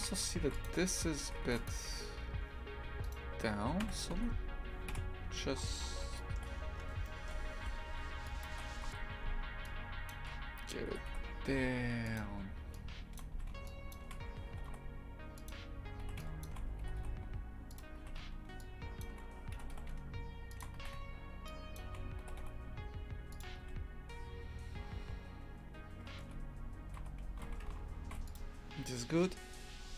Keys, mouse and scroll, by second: 0.0 shift+f, 3.0 right click, 3.8 KP_3, 4.1 Tab, 4.9 KP_Decimal, 5.5-6.2 scroll down 12, 6.2 shift+middle click, 6.5-7.0 scroll up 1, 7.0-8.9 shift+middle drag, 8.9 z, 10.1 shift+click, 10.9 g, 13.1 shift+click, 13.3 a, 13.9 shift+click, 14.5 g, 16.4 shift+click, 16.9 g, 19.0 shift+click, 19.6 g, 21.7 shift+click, 22.2 g, 26.2 Tab, 27.0 z, 27.4 shift+f.